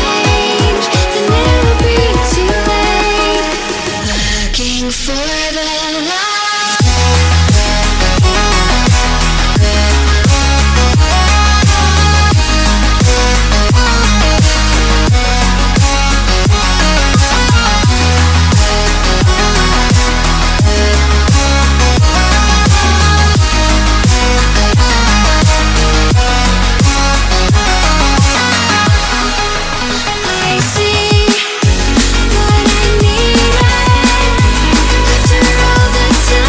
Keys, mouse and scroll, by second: 0.5 scroll down 2, 0.7-1.3 scroll up 2, 1.3-2.4 shift+middle drag, 2.4 click, 3.0 middle click, 3.3-6.0 drag, 6.0-7.5 middle drag, 7.5 click, 7.8 shift+a, 11.0-13.1 drag, 13.1-14.5 middle drag, 14.5 click, 15.8-17.3 drag, 17.3 middle click, 18.2 scroll down 2, 18.4 scroll up 3, 18.7-20.2 middle drag, 20.2-21.7 drag, 21.7 shift+a, 24.0-28.4 drag, 28.8-30.0 drag, 30.6-32.6 drag, 33.6 scroll down 2, 33.9-34.4 scroll up 2, 35.6-36.4 drag.